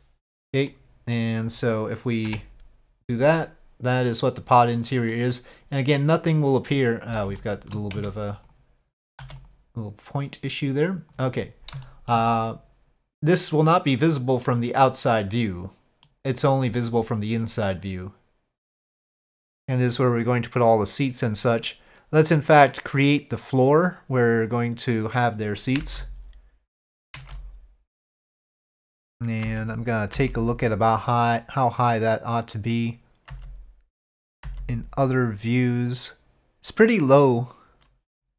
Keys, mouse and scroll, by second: 0.7-1.1 middle drag, 3.3-5.1 middle drag, 4.3 KP_Divide, 7.4-7.7 shift+middle drag, 7.9 Tab, 8.5 click, 9.2 1, 9.4-11.3 drag, 11.8 shift+middle click, 12.5-13.7 middle drag, 14.1 middle click, 15.2 middle click, 16.7-18.8 middle drag.